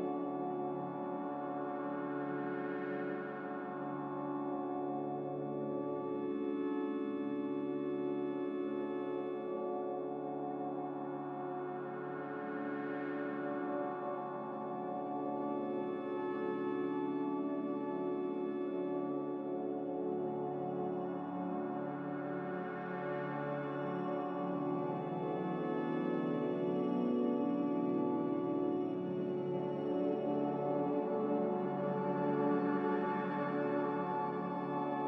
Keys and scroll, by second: 6.0 q, 7.1 q, 9.1 a, 10.6-11.6 typing, 27.3 a, 30.7 Return, 30.7 typing, 34.9 q.